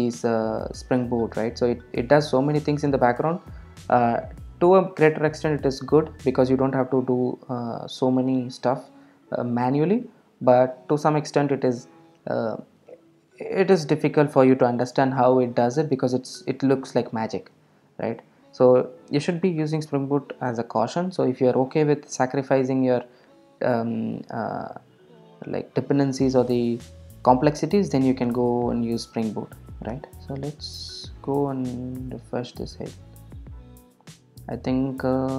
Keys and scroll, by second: 7.2 super+r.